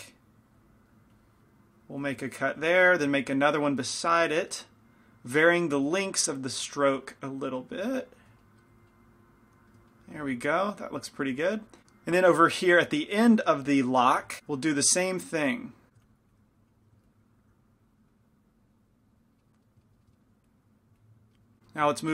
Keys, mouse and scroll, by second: 2.8-5.2 middle drag, 8.1 middle click, 9.4 middle click, 10.7-12.5 middle drag, 11.8 f, 12.8 f, 14.2 f, 14.4 f, 15.1-16.2 drag, 16.0 f, 16.4 click, 17.1-19.9 drag, 19.5 right click, 19.7 middle click, 20.5-21.6 drag, 20.5-21.6 right drag, 21.4 middle click, 21.8 middle click.